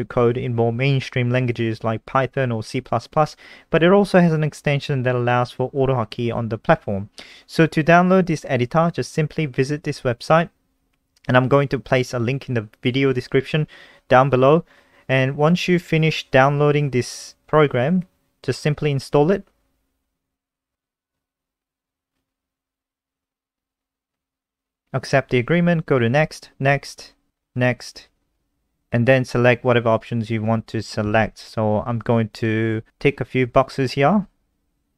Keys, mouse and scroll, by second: 0.1 click, 1.7-3.6 typing, 5.0-6.1 typing, 8.0 click.